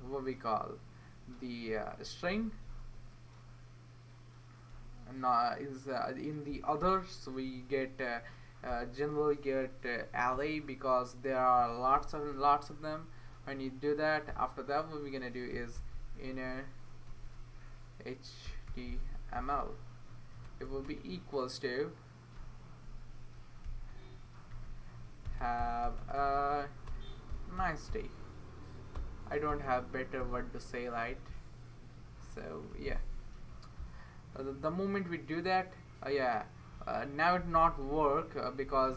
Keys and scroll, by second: 4.7 typing, 6.6-7.3 typing, 8.7 typing, 10.3 e, 11.9 Return, 13.3 Right, 13.5 Right, 14.3-21.3 typing, 22.4-23.0 typing, 24.5-30.2 typing, 31.1 ctrl+1, 32.7 !.